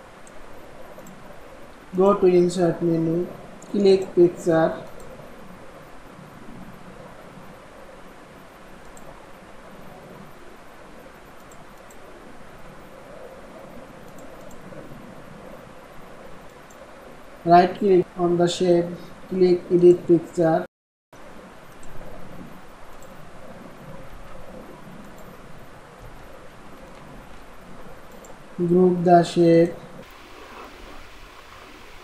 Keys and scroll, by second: 23.9 ctrl+x, 27.1 ctrl+v.